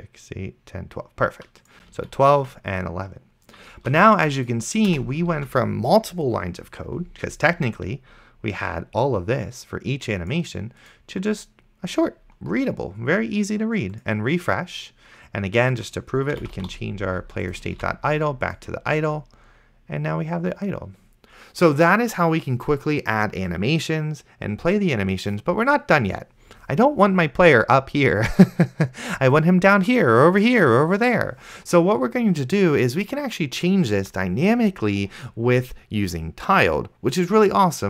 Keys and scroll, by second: 2.3 ctrl+w, 4.1 ctrl+s, 4.9 BackSpace, 5.6 ctrl+s, 16.2-17.3 typing, 18.0 ctrl+s.